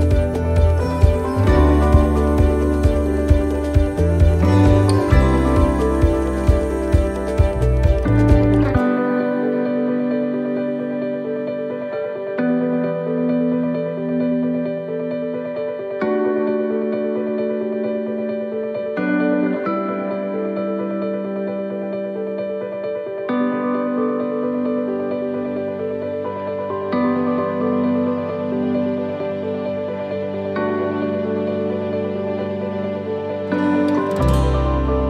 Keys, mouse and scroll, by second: 2.4 click, 5.9 s, 7.7 click, 9.9 middle click, 12.3 right click, 12.8 alt+shift+right click, 13.8 s, 16.7 click, 18.6 e, 20.6 s, 22.7 shift+middle click, 23.8 right click, 27.0 ctrl+r, 28.4 s, 32.8 right click, 33.5 alt+shift+right click, 34.6 s.